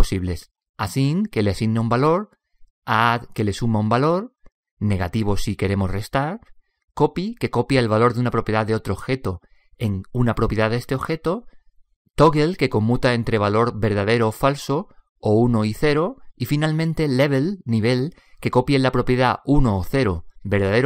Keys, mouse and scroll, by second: 0.5 middle click, 0.7 click.